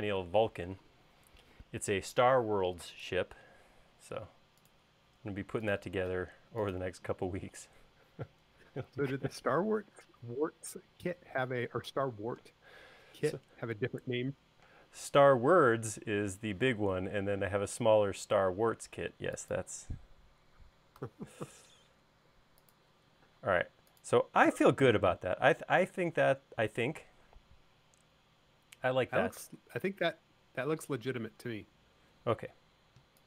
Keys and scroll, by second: 17.0 m, 23.7 space, 32.2 e.